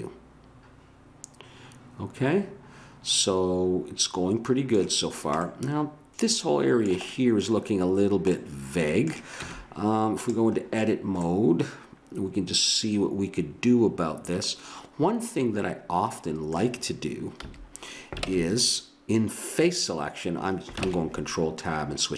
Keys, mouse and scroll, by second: 5.1-8.6 middle drag, 9.4 Tab, 17.4 a, 18.2 ctrl+Tab, 20.8 ctrl+Tab.